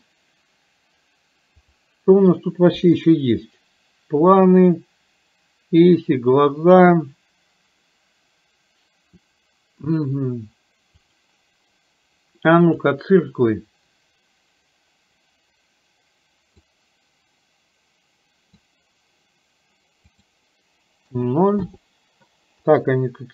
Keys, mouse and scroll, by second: 1.6-11.3 drag, 12.8 click, 16.6-18.6 drag, 20.1-21.8 drag, 22.6-23.3 middle drag.